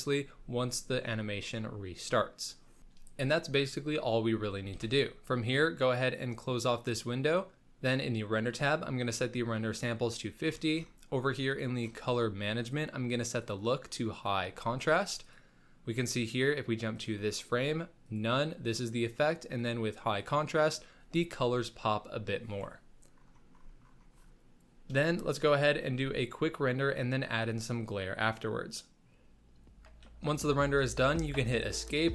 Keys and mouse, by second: 4.8 ctrl+s, 6.1 click, 8.8-10.1 drag, 13.4-14.3 drag, 15.5 click, 16.9-18.2 drag, 19.5-20.2 drag, 25.9 z.